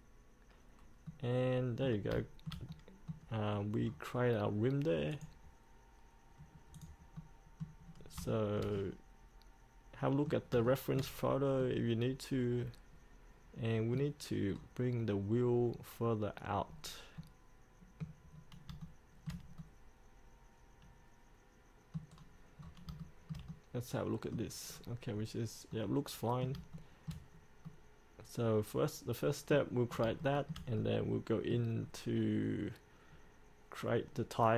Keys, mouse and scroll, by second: 1.3 middle click, 2.4 shift+middle click, 3.6-4.1 scroll down 1, 5.3 click, 6.9 click, 7.4 middle click, 8.0 scroll up 1, 8.5-10.5 shift+middle drag, 10.8 shift+middle click, 11.4-11.8 scroll up 1, 11.8-14.5 middle drag, 14.7 scroll down 1, 16.8 scroll up 1, 17.3 middle click, 18.5 scroll up 1, 19.0 shift+middle click, 19.8-22.3 middle drag, 22.3-23.1 scroll down 1, 23.2-24.7 shift+middle drag, 24.8 scroll down 1, 25.3-25.9 scroll up 1, 25.9 middle click, 26.9 shift+middle click, 27.5 scroll up 2, 27.8-29.8 middle drag, 30.4 shift+middle click, 30.9 middle click, 31.9 scroll down 1, 34.1 scroll up 1.